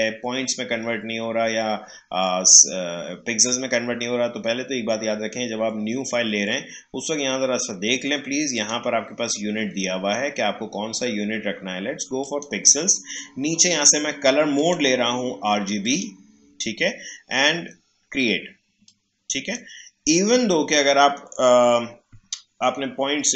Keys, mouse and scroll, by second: 8.5 click, 12.2 click, 14.6 click, 18.8-22.1 drag.